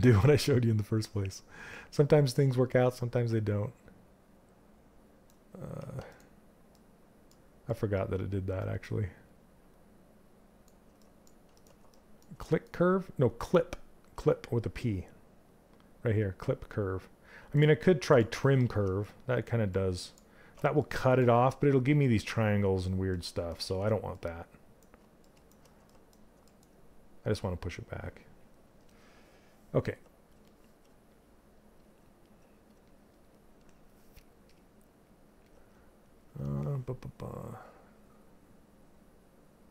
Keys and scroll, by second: 13.6 q.